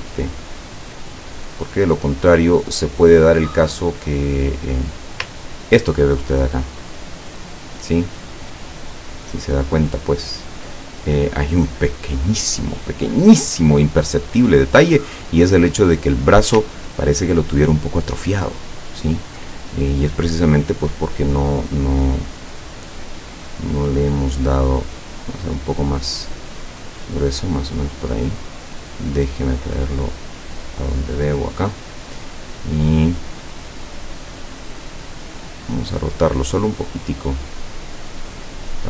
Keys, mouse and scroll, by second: 5.5-6.1 ctrl+scroll down 4, 6.5-7.7 ctrl+middle drag, 8.2 ctrl+scroll up 1, 16.8-19.5 ctrl+drag, 22.5-27.7 drag, 28.8-31.4 drag, 35.0 click, 36.5-38.8 drag.